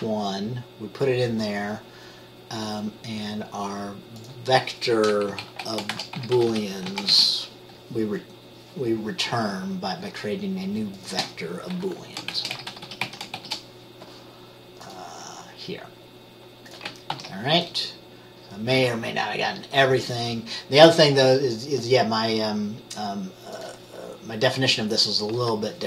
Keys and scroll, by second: 5.4 Right, 6.1-7.3 typing, 12.5-13.5 typing, 17.3 ctrl+s.